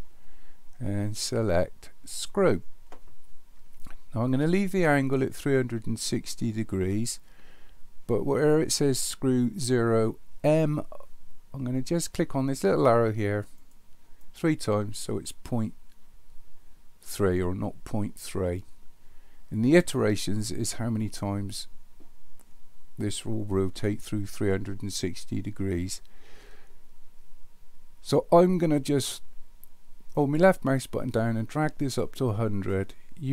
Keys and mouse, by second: 13.0 click, 13.6 click, 14.3 click, 30.3-32.0 drag.